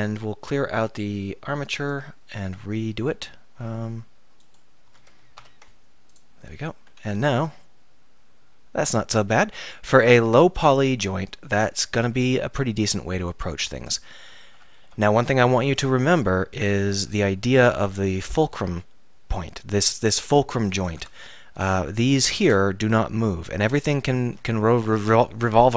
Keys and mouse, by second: 1.9-3.8 drag, 3.8-5.5 right drag, 5.5 ctrl+p, 6.4 z, 7.4 r, 10.1-12.4 drag, 11.5 r, 13.9 click, 14.8 alt+r, 15.7 KP_1, 16.3 KP_3, 17.0 z, 17.7 z, 20.8 click, 21.1 Tab, 24.6-25.7 middle drag.